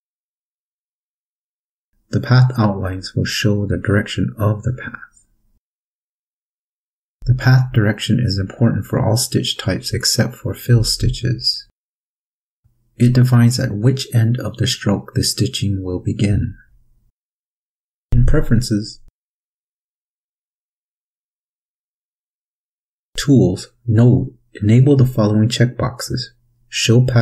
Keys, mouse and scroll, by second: 18.5 click, 20.3 click, 21.8-22.5 scroll up 2, 23.6 click, 27.1 click.